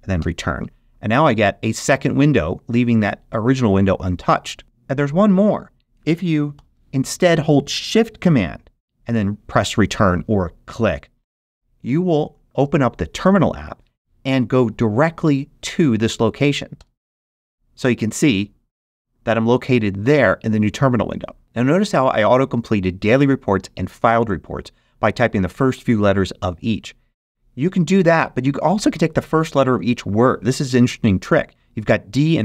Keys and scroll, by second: 0.1 alt+super+Return, 6.5 shift+super+g, 16.7 shift+super+Return.